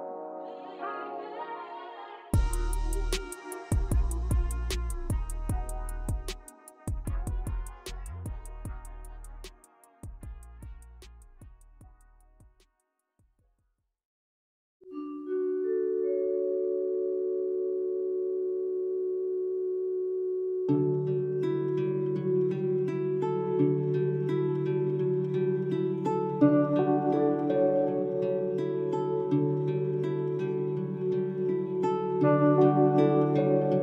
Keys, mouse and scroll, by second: 1.6 Tab, 2.9 Tab, 4.7-6.4 drag, 7.0 alt+shift+click, 8.0 click, 8.4-10.6 drag, 10.6-11.2 scroll down 3, 11.2 middle click, 12.0-13.1 drag, 13.1-14.6 middle drag, 16.0-17.6 drag, 18.6 shift+middle click, 19.1-19.8 scroll up 1, 20.0 scroll down 2, 21.6 a, 22.4 a, 23.5 u, 25.2-25.6 scroll up 2, 25.6-26.0 scroll down 3, 26.0 click, 26.2-26.6 scroll up 1, 26.6-27.9 drag, 27.9-29.5 middle drag, 29.5 Tab, 29.9 Tab, 30.8 click, 31.7 ctrl+shift+r, 32.9 click.